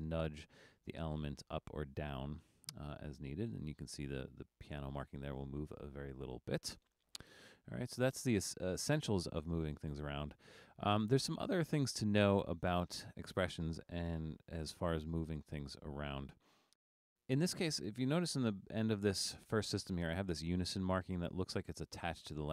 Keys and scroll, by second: 0.3 Up, 0.7 Up, 2.8 Down, 14.0 super+=.